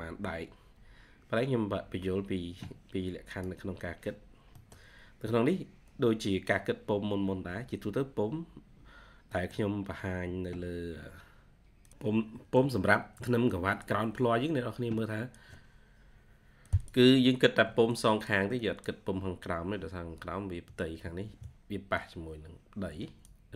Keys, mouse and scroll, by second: 0.6-1.7 scroll up 1, 4.5 middle click, 5.2 scroll up 1, 8.9 scroll down 1, 9.2 middle click, 9.5-10.5 scroll down 1, 11.8 double click, 12.0 scroll down 1, 12.8 ctrl+scroll down 1, 17.0 scroll up 2.